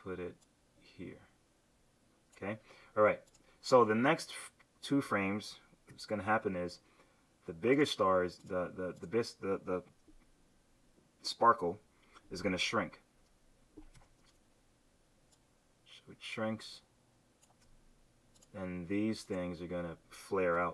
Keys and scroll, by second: 5.9 F6, 13.9 q, 20.5 v.